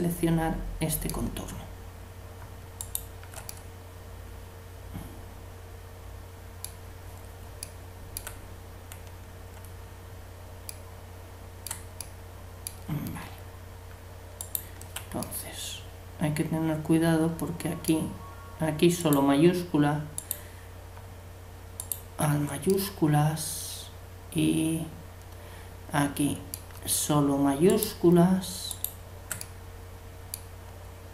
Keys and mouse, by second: 2.8-4.0 right drag, 3.5 click, 3.5-5.3 middle drag, 7.6 middle click, 14.4-16.2 right drag, 15.3 click, 16.2 middle click, 19.0-24.7 middle drag, 19.0-23.6 right drag, 22.7 click, 27.7-29.4 right drag, 29.4-31.1 middle drag, 29.7 right click.